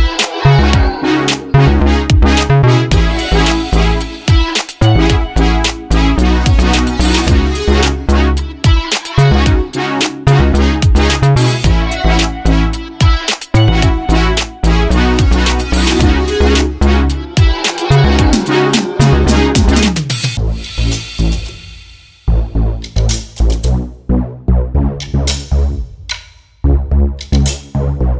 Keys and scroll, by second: 0.1 /, 0.5 5, 0.6 Return, 3.2 space, 4.9 s, 14.7 s, 18.9 space, 19.8 s, 27.0 h, 27.8 space.